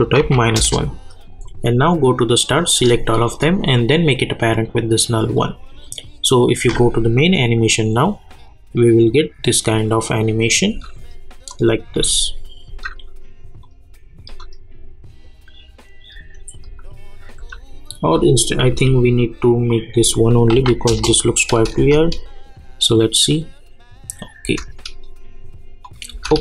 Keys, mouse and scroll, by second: 0.5 Return, 1.4 click, 3.2 shift+click, 4.5-6.1 drag, 6.6 space, 10.7 space, 11.5 click, 11.9 space, 13.6 click, 14.3 space, 16.4 space, 18.4 click, 18.7 k, 20.0 click, 20.9 Return, 21.5 click, 21.8 space, 24.4 space, 24.6 click, 26.1 space.